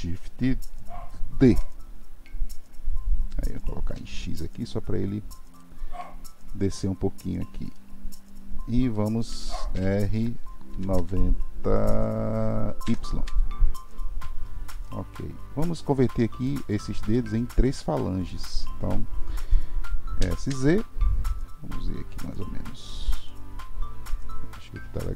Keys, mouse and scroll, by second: 1.4 shift+d, 7.7-9.7 middle drag, 9.7 r, 14.9-16.6 middle drag, 16.6-17.1 scroll up 1, 17.1-20.1 shift+middle drag, 20.1 s.